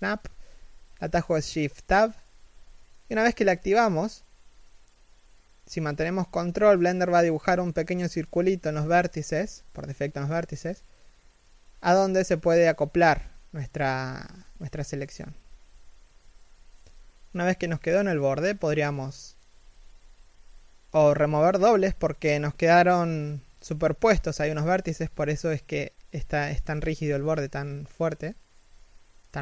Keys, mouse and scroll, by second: 1.3-2.0 scroll up 1, 2.0 g, 7.7 g, 11.5 middle click, 11.9 z, 12.1 1, 12.5 middle click, 13.2 a, 13.3-13.7 scroll down 1, 13.7 middle click, 14.2 a, 14.5 middle click, 14.7 a, 15.2 middle click, 16.2 w, 16.9 a, 17.2 w, 19.1 middle click, 22.0 3, 22.5 z, 23.7-24.9 scroll up 1, 24.9 middle click, 25.2 z, 25.4 middle click, 29.2 middle click.